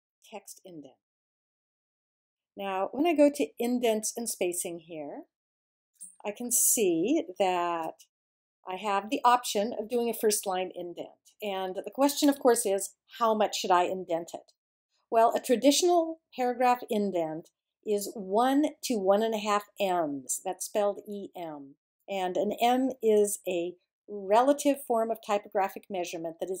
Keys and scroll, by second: 0.0-0.2 typing.